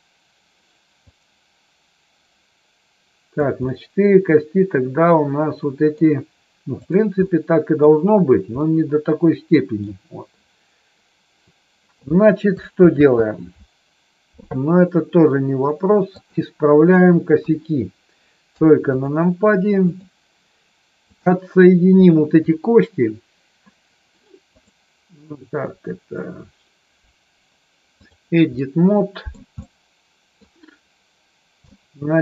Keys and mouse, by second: 1.0-3.3 drag, 3.5-6.0 middle drag, 7.3 middle click, 8.7-9.8 middle drag, 12.8 ctrl+z, 15.5 click, 17.4 KP_1, 18.9 click, 19.9 click, 21.0 click, 24.5-28.2 drag, 28.5 middle click, 29.5 middle click, 31.7 middle click.